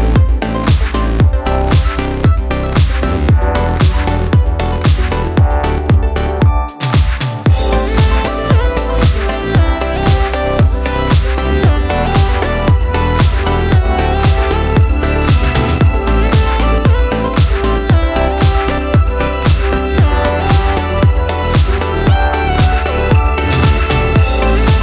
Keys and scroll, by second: 2.3 ctrl+t, 19.2 Up, 20.8 ctrl+a, 23.6 ctrl+d.